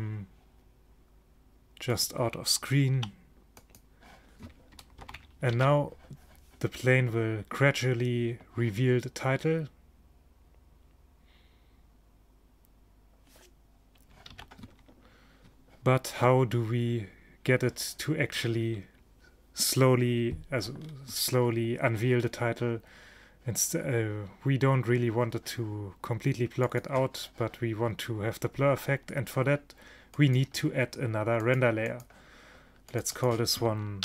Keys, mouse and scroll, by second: 3.1 i, 5.1 ctrl+shift+Down, 5.6 alt+a, 14.4 alt+a, 21.0-26.8 middle drag, 26.8-28.4 drag, 30.2-34.0 drag.